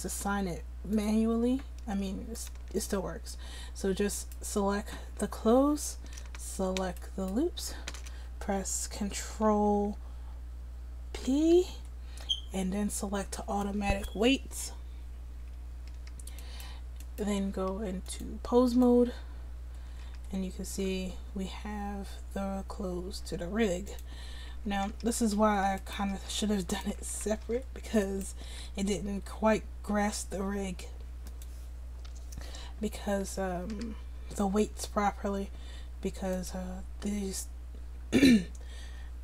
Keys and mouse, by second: 4.2-7.0 drag, 7.0-11.2 right drag, 11.2 ctrl+p, 16.5-18.1 right drag, 20.0 r, 24.3 a, 24.7 a, 25.1 alt+r, 26.2 r, 26.9 a, 27.1 a, 27.5 alt+r, 28.4 r, 33.7 r.